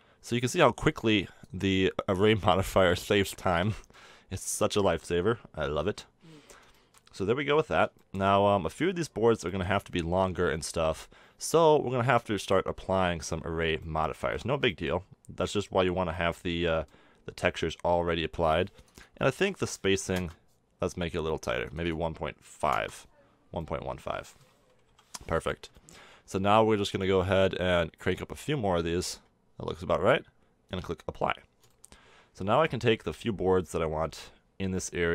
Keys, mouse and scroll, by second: 4.2-17.2 middle drag, 17.3 middle drag, 19.2-21.1 drag, 21.1-22.1 middle drag, 22.1-23.7 drag, 23.8-25.3 middle drag, 25.3 KP_7, 25.8-27.4 middle drag, 28.9 middle click, 31.7 middle click, 32.2 middle drag, 32.3 click, 34.1 Tab.